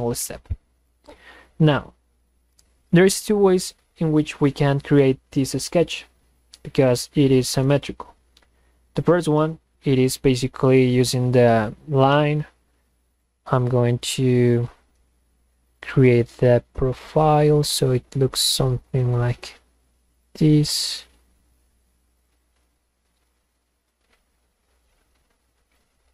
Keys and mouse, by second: 11.0 click, 13.2 click, 15.7 drag, 17.0 click, 18.4 click, 22.2 click, 23.8 click, 25.7 click.